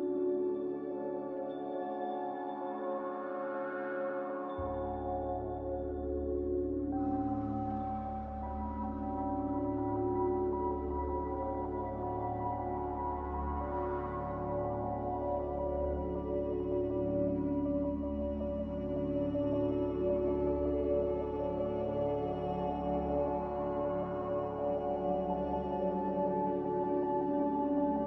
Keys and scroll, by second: 4.8 n, 7.0 b, 8.8 typing, 10.1-10.8 typing, 13.9 b, 19.8 a.